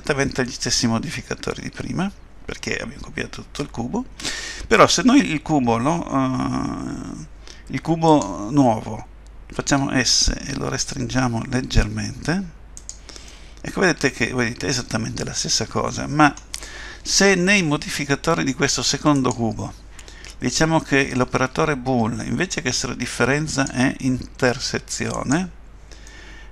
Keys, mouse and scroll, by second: 8.1 click, 9.6 s, 13.3 middle click, 19.2 click, 23.5 click, 26.1 middle click.